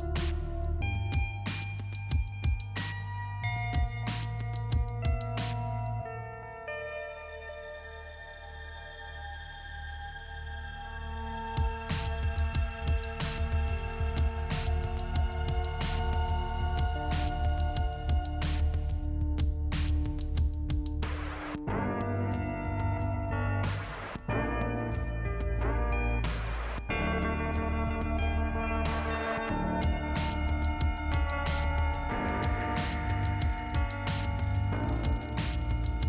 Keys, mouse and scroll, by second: 0.5 click, 1.7 right click, 2.9 p, 3.3-3.6 scroll down 2, 5.6 middle click, 7.2 middle click, 8.8 scroll up 1, 9.2 scroll down 1, 9.3 scroll up 1, 9.4 scroll down 1, 10.6 click, 14.9 click, 16.5 k, 17.1-17.5 scroll down 1, 17.9 click, 19.2 click, 22.3 click, 23.5 click, 25.3 click, 27.8-28.7 scroll up 2, 28.7 click, 30.2 click, 32.3 click, 34.5 p, 34.9 scroll down 2.